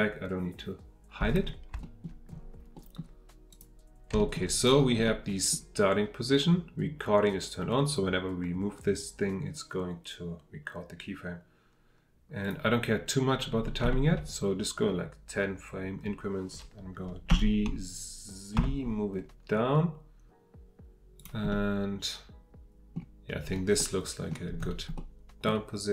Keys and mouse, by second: 1.8 shift+middle click, 2.7 middle click, 3.5 click, 4.2 shift+middle drag, 5.0-5.5 middle drag, 12.4 click, 13.9 shift+middle drag, 17.3 g, 18.6 z, 21.6-22.9 drag, 23.5-23.9 middle drag, 23.9-24.3 drag, 24.3-25.0 middle drag, 25.0-25.4 drag, 25.4 middle click.